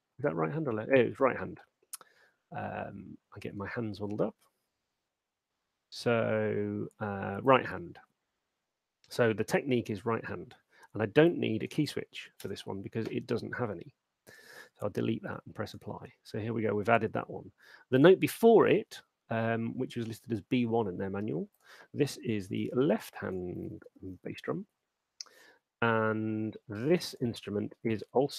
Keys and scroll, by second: 12.4 BackSpace, 22.3-24.8 typing.